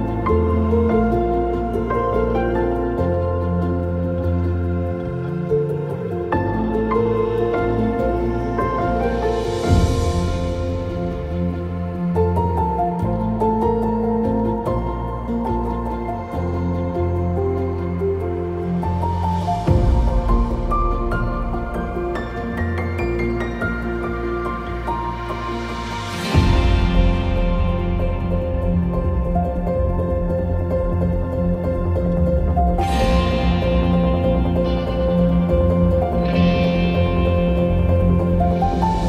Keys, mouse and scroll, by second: 0.4 click, 8.8 click, 8.8 middle click, 8.9 click, 9.4 click, 11.3 click, 11.3 scroll down 1, 11.4 middle click, 11.6 scroll up 2, 12.1 click, 13.8-16.6 drag, 17.6 click, 18.9 click, 19.1-21.9 drag, 21.9 middle click, 22.0 KP_0, 22.5-24.1 middle drag, 24.1 click, 24.2 middle click, 24.2 scroll up 2, 24.4-25.5 drag, 24.7 ctrl+z, 25.5 shift+middle click, 26.2 click, 26.8-28.3 drag, 28.3 middle click, 28.9 shift+middle click, 29.1 click, 29.5 middle click, 29.8 middle click, 30.0 shift+middle click, 30.3 click, 30.5 shift+middle click, 30.7 click, 31.5-32.0 shift+middle drag, 32.0 click, 32.8 middle click, 33.5 click, 33.6-34.0 shift+middle drag, 34.0 click, 34.3-34.6 shift+middle drag, 34.6-34.9 drag, 34.9 middle click, 35.2-35.7 drag, 35.7 middle drag, 35.9 drag, 36.0 middle drag, 36.1 click, 36.2 middle click, 36.4 click, 36.9 middle drag, 37.1 click, 37.2 ctrl+middle click, 38.0 click, 38.4 middle click.